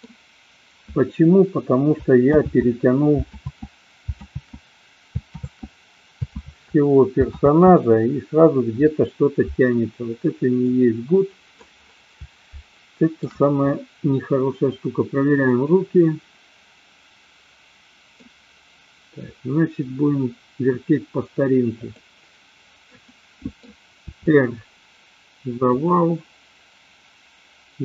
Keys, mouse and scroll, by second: 2.8 ctrl+z, 10.7-11.7 middle drag, 12.8-13.3 shift+middle drag, 13.7-18.3 middle drag, 23.0-23.7 middle drag, 24.2 r, 25.8 click.